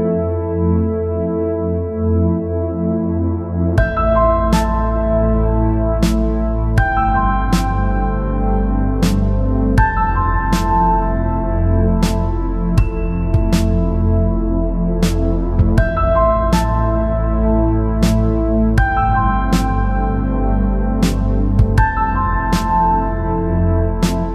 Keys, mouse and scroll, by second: 0.6 g, 2.3 middle click, 2.9 Tab, 4.7 space, 5.7 space, 6.5 click, 7.3-9.2 drag, 9.9 click, 11.2-13.9 drag, 14.5 KP_3, 15.4 KP_1, 15.9 b, 17.0 r, 18.6 g, 20.2 middle click, 21.7 space.